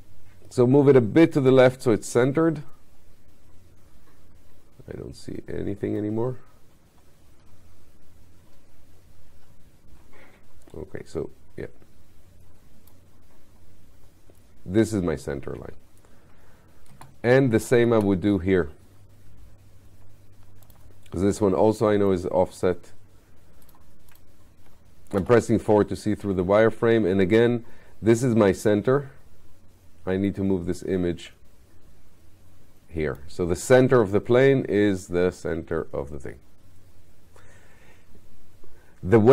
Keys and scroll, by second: 16.9 space, 25.2 4.